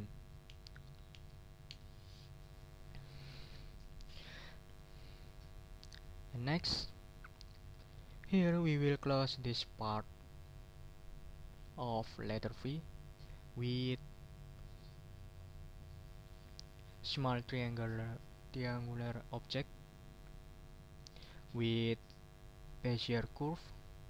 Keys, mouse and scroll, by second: 0.5 Right, 2.5 click, 5.0 click, 5.7 middle click, 9.2 middle click, 20.6 middle click, 23.6 click.